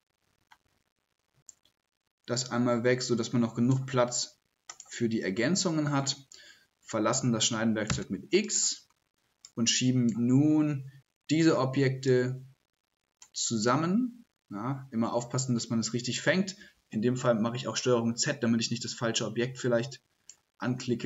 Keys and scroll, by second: 16.6 shift+s, 17.1 ctrl+z.